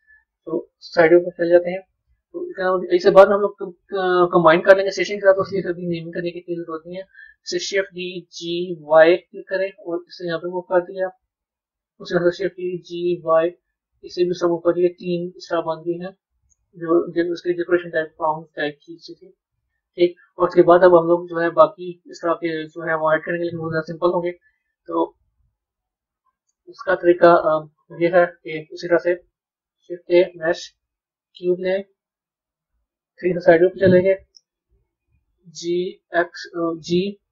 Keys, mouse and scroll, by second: 0.8 KP_3, 7.6 shift+d, 12.3 shift+d, 17.1 a, 18.5-23.6 middle drag, 25.0-28.1 middle drag, 29.5 shift+a, 32.6 KP_3, 35.3 g, 37.1 g.